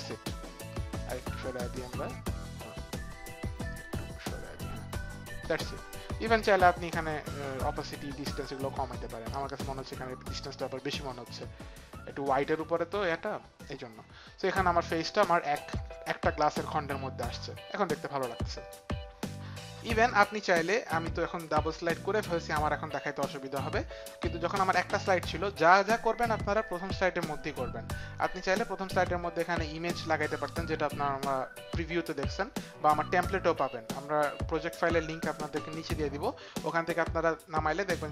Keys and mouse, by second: 1.2 click, 1.8 click, 4.1 click, 7.9 click, 8.7 click, 20.7 click, 23.3 click.